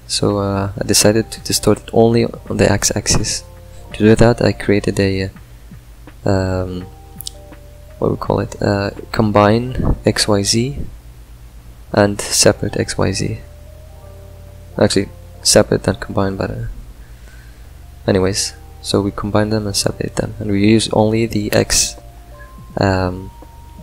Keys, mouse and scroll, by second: 1.6 ctrl+right click, 4.7 click, 7.6 click.